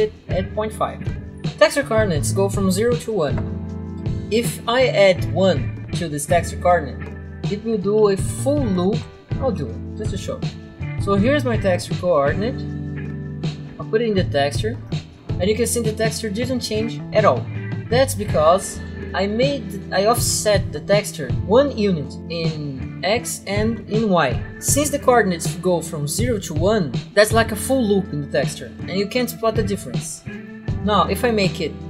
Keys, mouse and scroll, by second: 0.8-1.5 typing, 9.5 typing, 9.5 Return, 10.6 click, 10.9 click, 10.9 click, 13.0 click, 15.1 right click, 17.7 right click, 30.5 click, 30.6 typing, 30.9 Return.